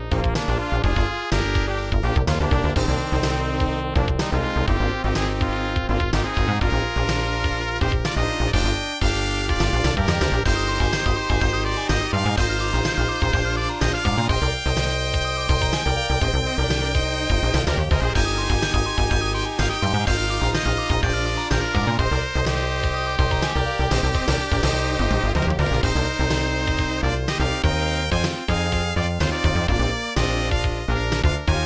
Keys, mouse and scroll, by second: 0.4 right click, 1.6 click, 8.6 click, 11.2 click, 14.1 click, 16.1 click, 16.9-17.3 typing, 17.6 Return, 18.8-19.1 scroll down 2, 21.3 click, 21.5 click, 23.7 click, 23.9 click, 26.1 click, 29.5 click.